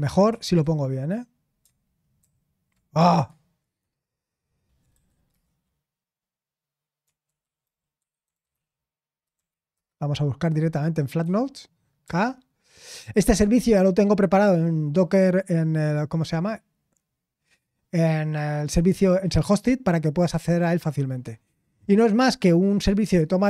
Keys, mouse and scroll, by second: 0.0-1.4 typing, 2.2 ctrl+w, 3.9 alt+space, 4.4-4.9 typing, 5.2 Return, 7.0-9.0 typing, 9.3 Down, 9.7 Return, 11.7-12.5 typing, 14.3 typing, 16.5-17.6 scroll down 1.